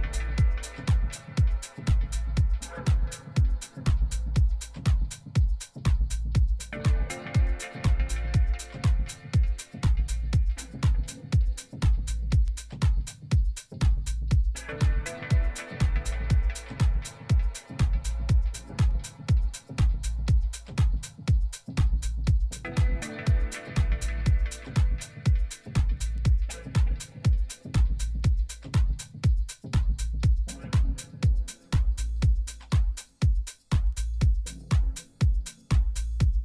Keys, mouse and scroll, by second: 2.3 s, 3.8 r, 9.6 g, 11.9 s, 14.7 g, 27.6-30.6 middle drag, 28.1 z, 32.2 middle click, 33.2-35.8 right drag, 34.8-36.4 drag.